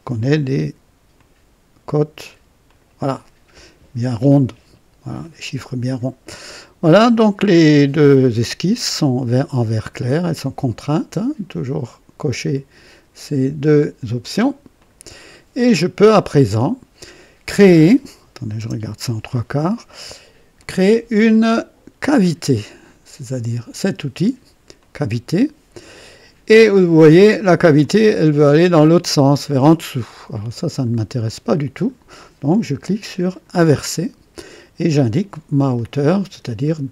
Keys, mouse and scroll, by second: 1.1-2.5 drag, 2.6 click, 5.1 click, 14.7 click, 18.5 KP_0, 19.2 right click, 20.5 click, 24.7 click, 27.8-31.0 drag, 31.2 click, 33.2 click, 35.5-35.8 scroll up 2, 36.6 scroll up 2.